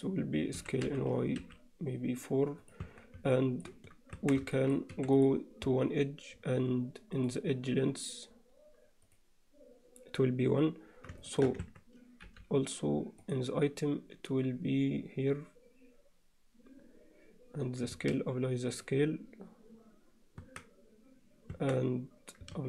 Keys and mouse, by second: 0.6 s, 2.9 Tab, 3.3 alt+middle click, 4.2 Tab, 4.5 shift+middle click, 4.9 2, 5.2 click, 7.2-9.5 drag, 11.3 alt+shift+middle click, 11.7 Tab, 12.3 n, 13.3 click, 17.9 ctrl+a, 20.5 Tab, 21.5 Tab, 22.5 ctrl+a.